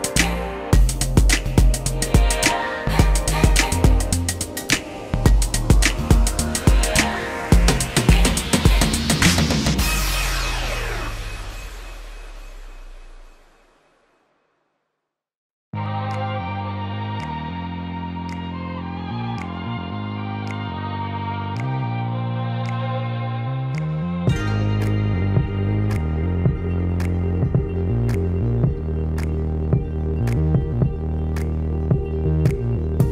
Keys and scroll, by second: 25.7 alt+t.